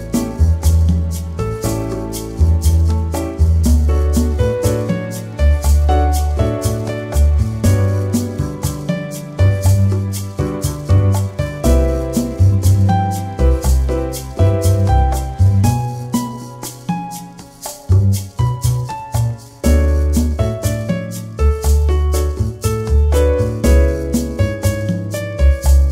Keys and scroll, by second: 12.1 z, 14.7 l, 17.0 p, 24.8 ctrl+-.